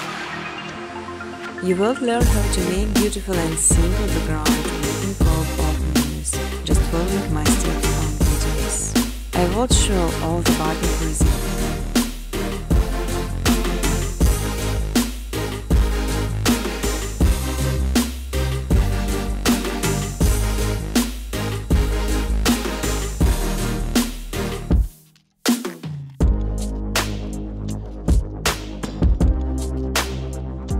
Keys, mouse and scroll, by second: 2.7 click, 3.1 click, 4.3 click, 6.5 click, 6.8-7.2 typing, 8.2 Tab, 8.8-9.9 typing, 11.4-12.1 typing, 22.9 space, 23.9 space, 24.5 click, 24.8 right click, 26.8 click, 28.3 click, 28.9-30.2 typing.